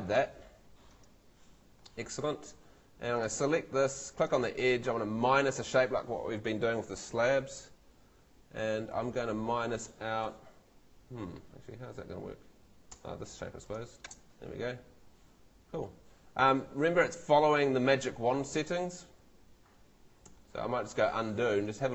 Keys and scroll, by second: 12.9 space, 20.3 super+z.